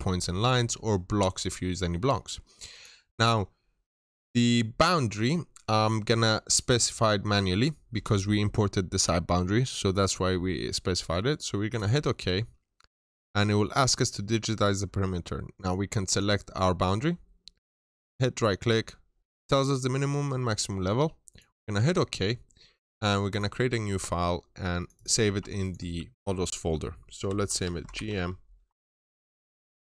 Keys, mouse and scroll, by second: 16.0 click, 17.6 right click, 21.2 click, 24.8 double click, 25.5 click, 27.2-29.8 typing, 29.8 Return.